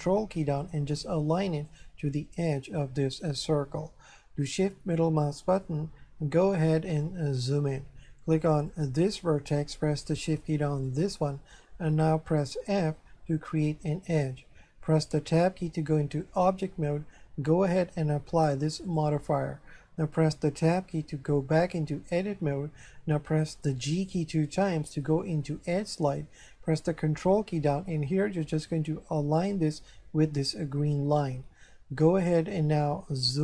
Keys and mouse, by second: 4.7 shift+middle click, 7.0 shift+middle click, 8.7 right click, 10.9 shift+right click, 12.7 f, 15.4 Tab, 18.9 click, 20.9 Tab, 24.4 g, 29.4 ctrl+click.